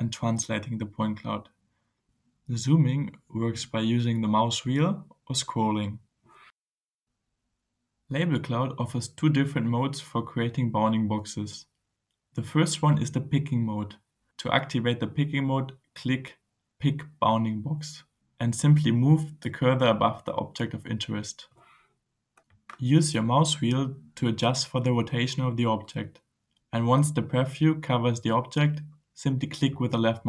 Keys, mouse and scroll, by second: 0.1-2.6 right drag, 3.4-4.1 scroll up 2, 4.2-4.8 scroll down 2, 4.9 scroll down 2, 5.3-5.8 scroll up 1, 6.0-6.6 scroll down 2, 6.6-7.1 scroll up 2, 8.1 right click, 8.8-10.6 drag, 17.1 click, 24.2-25.6 scroll up 4, 25.8-26.2 scroll up 2, 29.6 click.